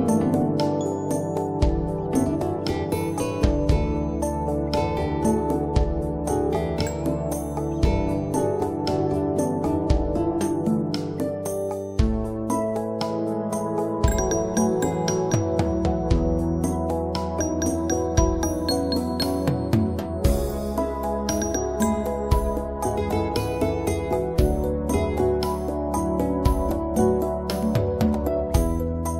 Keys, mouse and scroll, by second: 0.2 click, 1.6 scroll up 1, 1.9 scroll down 1, 3.6 click, 5.6 scroll up 1, 8.3 click, 13.3 right click, 13.8 click, 25.0 click, 27.0 scroll down 1, 28.4 click.